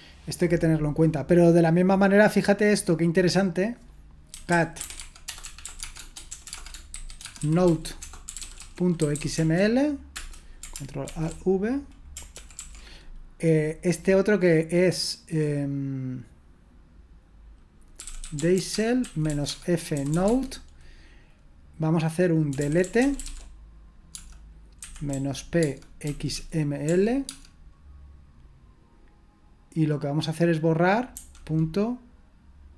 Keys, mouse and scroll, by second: 0.1-2.9 drag, 4.3-9.8 typing, 10.1 Return, 11.1 ctrl+alt+v, 12.4-13.1 typing, 17.7-20.6 typing, 22.3-27.3 typing.